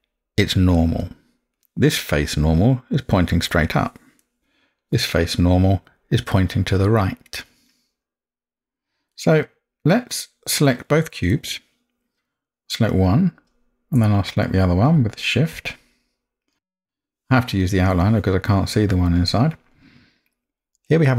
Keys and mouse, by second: 1.0-1.5 middle drag, 4.2-4.8 middle drag, 9.1-9.8 middle drag.